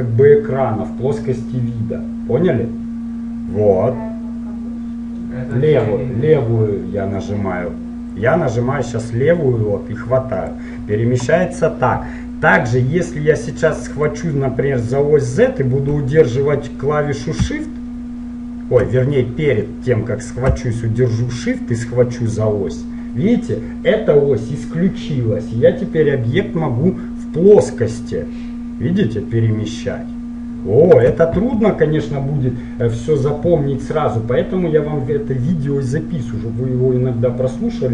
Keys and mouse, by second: 8.3-10.2 drag, 14.2-18.3 drag, 21.9-23.8 drag.